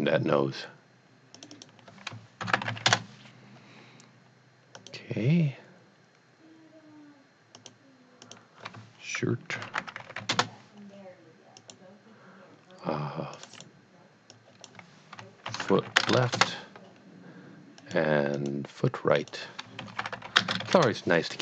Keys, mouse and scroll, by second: 1.3 click, 1.6 double click, 2.4 shift+n, 2.5 o, 2.8 Return, 4.8 click, 7.6 click, 7.9 click, 8.2 click, 9.6-10.2 typing, 10.3 Return, 11.6 click, 13.6 double click, 14.3 click, 15.5-16.2 typing, 16.3 Return, 17.9 click, 18.4 click, 19.2 click, 19.8-20.6 typing, 21.3 Return.